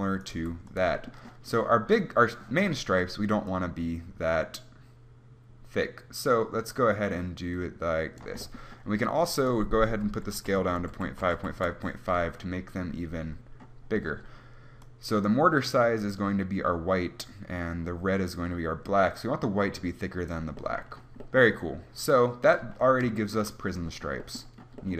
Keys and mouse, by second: 0.5-5.8 drag, 0.6 g, 11.4 click, 15.2-22.8 drag.